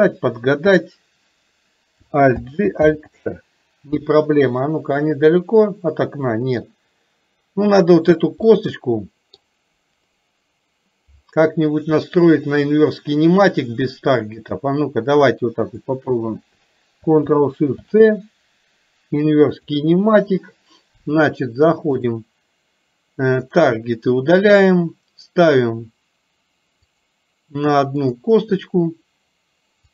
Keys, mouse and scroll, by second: 4.3-6.7 middle drag, 8.5-9.5 middle drag, 12.2-12.7 shift+middle drag, 14.4 click, 19.8 ctrl+shift+c, 22.0 click, 23.5 click, 28.0 click.